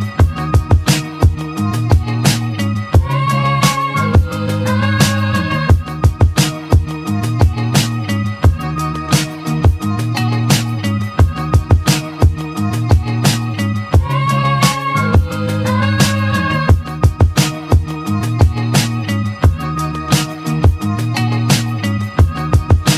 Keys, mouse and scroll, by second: 4.0 g, 7.5 click, 8.5 h, 10.2-10.8 scroll up 3, 10.8-12.1 shift+middle drag, 12.1 click, 12.9 r, 16.0 s, 17.8 g.